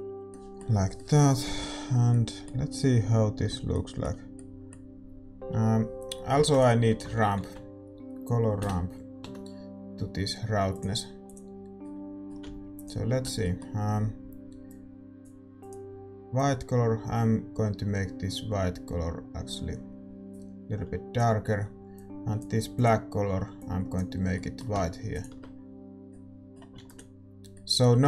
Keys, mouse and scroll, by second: 12.8 middle click, 16.6-19.3 drag, 23.9 click, 25.1-28.0 drag, 25.1-28.0 right drag.